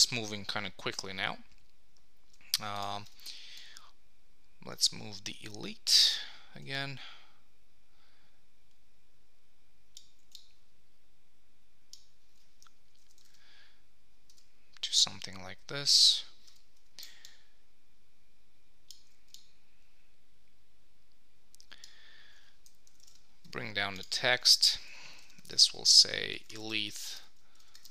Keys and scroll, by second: 12.9 Up, 13.2 super+s, 22.9 Down, 23.1 super+s, 24.4 super+a, 26.9 shift+a, 27.1 Return.